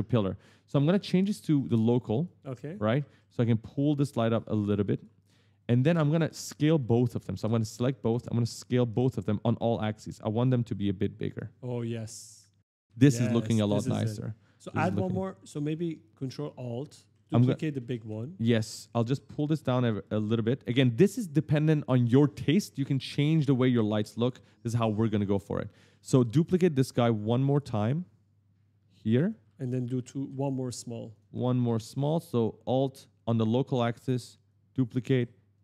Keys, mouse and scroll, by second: 2.1 click, 2.5-3.3 typing, 4.1 click, 5.9 shift+click, 6.0-9.2 typing, 6.2 right click, 8.3 right click, 9.8 click, 11.9 right click, 15.1 q, 16.1 click, 16.5-18.3 typing, 16.7 right click, 17.5 right click, 18.8 click, 19.8 right click, 20.0 d, 23.3-24.5 typing, 25.5 right click, 27.0 alt+click, 29.1 right click, 29.3 e, 29.8 w, 30.9 click, 34.3 alt+click.